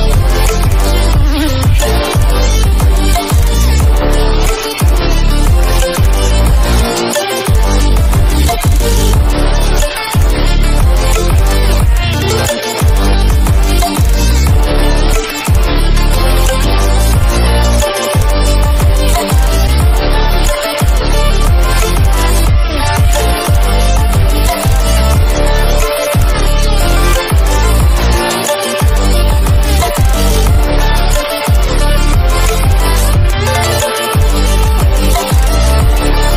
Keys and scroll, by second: 13.9 ctrl+=, 14.4 ctrl+-, 16.2 ctrl+=, 23.0 ctrl+-, 26.8 ctrl+=, 26.9 ctrl+-, 36.2 ctrl+=.